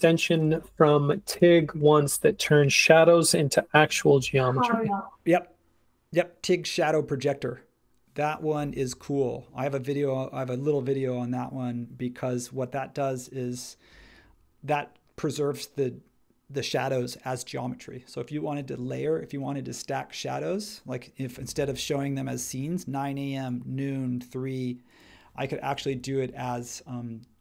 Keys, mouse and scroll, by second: 25.8 space.